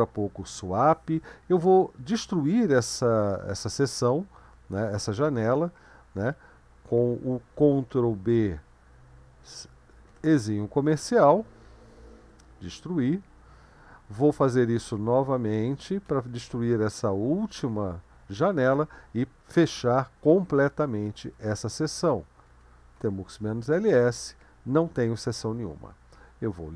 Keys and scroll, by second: 7.7 ctrl+b, 10.1 typing, 12.2 typing, 14.8 ctrl+b, 16.1 typing, 17.6 typing, 20.9-23.6 typing, 26.4 ctrl+l.